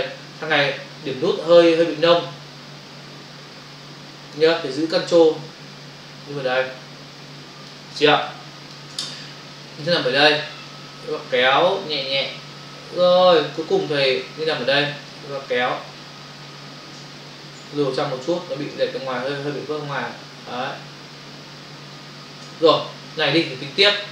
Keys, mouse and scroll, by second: 2.0 alt+click, 5.7 ctrl+click, 8.1 space, 8.2 click, 8.3 space, 10.7 click, 15.7 click, 17.0 space.